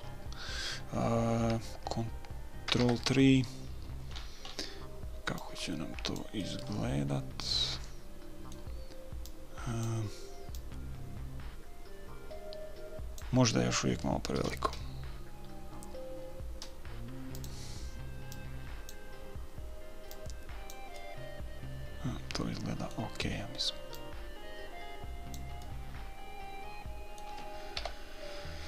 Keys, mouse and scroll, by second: 3.2 ctrl+KP_3, 4.5-5.7 middle drag, 5.8-6.8 drag, 6.9 middle click, 7.4 click, 7.6-8.8 middle drag, 9.6-12.9 drag, 14.7 s, 18.7-21.4 drag, 22.4 middle click, 24.3-26.0 drag, 26.0-27.9 middle drag, 28.1 KP_3.